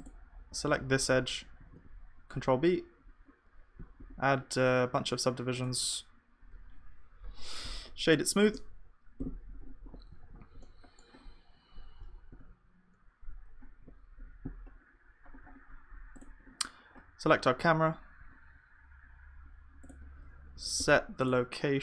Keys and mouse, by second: 1.7 ctrl+b, 5.8 Tab, 7.3 F3, 10.2 ctrl+s, 10.8-12.7 middle drag, 12.3 KP_0, 14.3-18.2 middle drag, 18.2 n.